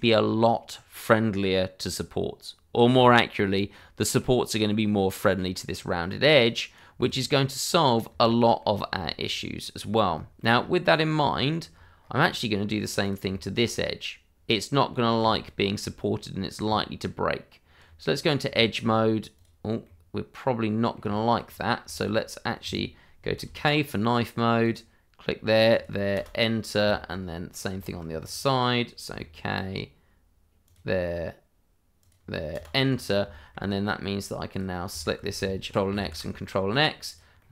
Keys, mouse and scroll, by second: 0.3-1.0 scroll down 1, 1.0 middle click, 2.9 shift+middle click, 3.3-3.7 shift+scroll up 1, 3.7 middle click, 5.3-6.4 scroll down 1, 6.4 right click, 7.3 middle click, 10.1 shift+middle click, 10.5-10.9 scroll up 1, 10.9 middle click, 11.7-12.3 scroll up 1, 12.3 middle click, 13.0 click, 13.3 middle click, 16.6 Tab, 18.1 scroll up 1, 18.8-19.3 shift+scroll up 1, 19.3 click, 19.8 middle click, 21.5-21.8 scroll up 1, 21.8 shift+middle click, 23.3 k, 24.6 click, 26.1 Return, 26.5-26.8 scroll down 1, 26.9 shift+middle click, 28.0 scroll up 1, 29.1 k, 30.6 click, 32.5 Return, 32.8-33.2 scroll down 1, 33.3 shift+middle click, 34.5 click, 34.9 shift+middle click, 35.6 ctrl+x, 35.7 click, 36.0 ctrl+x, 36.4 middle click.